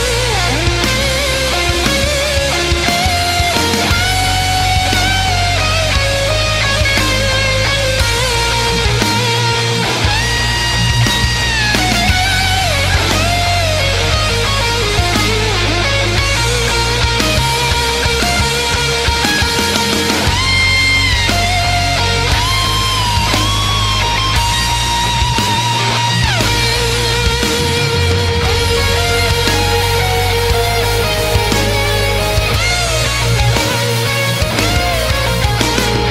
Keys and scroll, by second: 1.5 space, 4.7 space, 5.7 space, 6.4 ctrl+z, 11.4 ctrl+z, 11.5 space, 13.0 space, 15.0 ctrl+z, 16.5 space, 19.5 ctrl+z, 26.2 space.